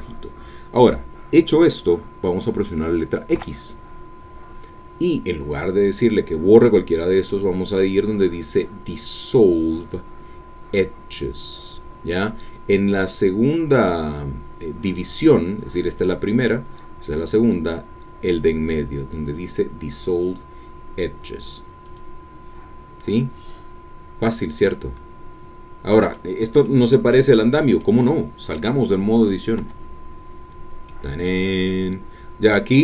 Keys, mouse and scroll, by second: 3.3 x, 21.8-23.1 drag, 23.1-26.3 middle drag, 26.6-28.0 middle drag, 29.6 Tab, 30.4-30.8 scroll down 1, 30.8-32.8 middle drag.